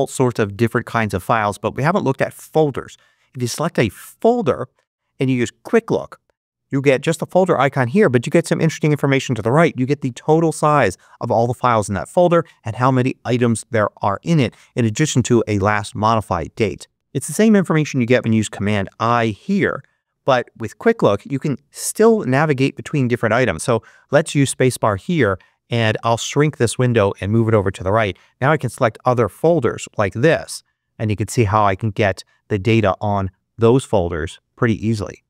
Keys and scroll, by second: 5.6 space, 18.0 super+i, 24.2 space.